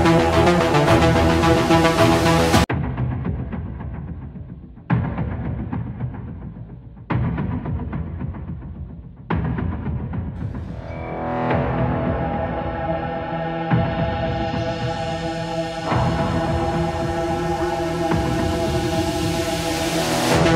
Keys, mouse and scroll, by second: 0.6-1.6 middle drag, 1.7 Return, 3.1-4.2 drag, 4.4-5.6 middle drag, 6.2-7.3 middle drag, 7.4-8.5 middle drag, 9.4-10.6 middle drag, 11.2-13.6 middle drag, 15.3 middle click, 15.6 click, 17.6 middle click, 18.7 middle click.